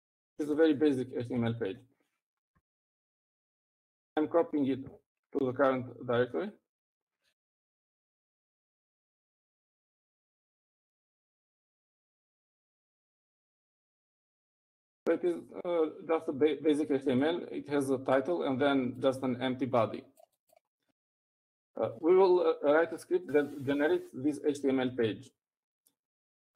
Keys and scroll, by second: 0.1 Up, 0.3-2.3 typing, 2.8 ctrl+d, 3.1 ctrl+d, 3.7-4.4 typing, 5.7-6.4 typing, 7.9-9.4 typing, 12.2-13.8 typing, 22.8-23.8 typing.